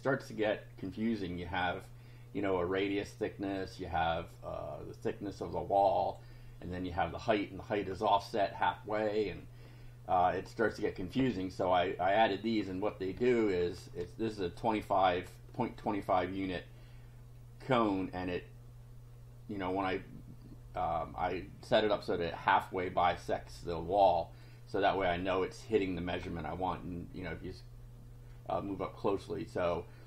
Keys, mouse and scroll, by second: 5.5 click, 8.7 click, 10.4 click, 12.3-12.6 scroll up 1, 14.6 click, 24.4-25.4 drag, 26.2-27.0 scroll up 4, 28.7-29.3 scroll down 2.